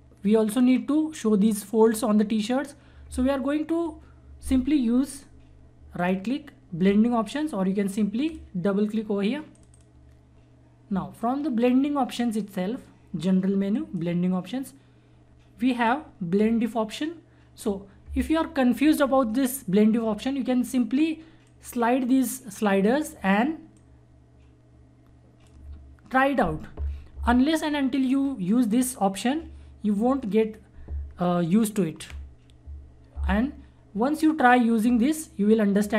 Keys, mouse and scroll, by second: 5.9 right click, 8.2-21.4 drag, 21.4-28.0 drag.